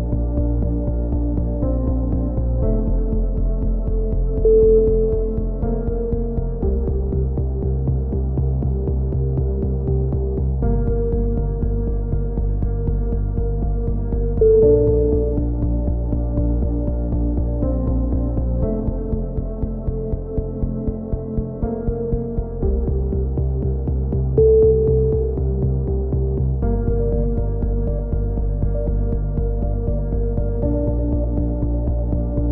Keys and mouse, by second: 1.0 ctrl+z, 1.4-2.8 right drag, 2.8 click, 3.2 z, 3.8 middle click, 4.7 click, 5.2 middle click, 5.4 KP_3, 5.8 z, 7.5 middle click, 8.3 click, 9.5 r, 11.3 click, 12.1 a, 12.3 z, 12.5 middle click, 13.5 click, 14.3 right click, 15.2-16.2 middle drag, 16.2-17.5 drag, 17.5 f, 17.8-19.4 drag, 18.1 z, 19.2 f, 19.7 a, 20.0 click, 20.7 f, 21.2 a, 21.3 z, 21.5 Tab, 22.0-23.3 middle drag, 23.3 click, 24.0 Tab, 24.8 a, 25.3 a, 25.4 q, 26.4 ctrl+r, 27.2 a, 27.5 ctrl+r, 29.1 a, 30.1 ctrl+r, 31.5-32.5 typing, 32.4 click.